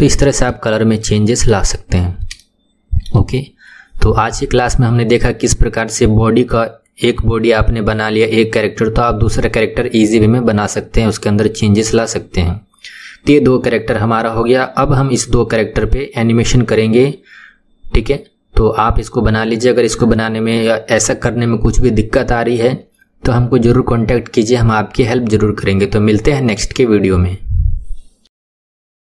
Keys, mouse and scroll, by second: 0.8-1.2 scroll up 1, 1.2-5.6 shift+middle drag.